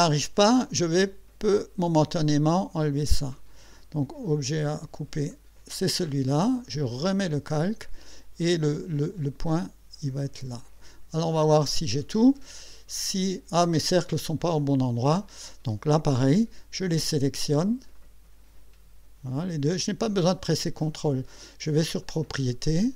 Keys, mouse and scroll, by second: 1.5 click, 5.3 click, 7.0 click, 10.4 click, 11.7 click, 12.4 right click, 18.0 click, 20.5 click, 22.0 click.